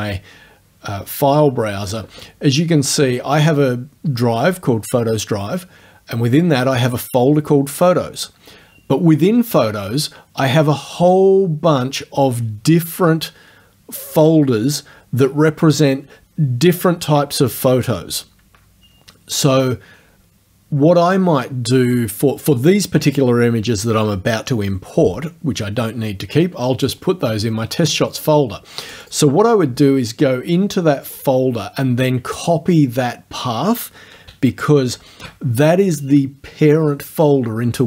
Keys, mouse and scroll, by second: 26.9 click, 27.9 click, 28.9 click, 31.1 click, 35.0 ctrl+c.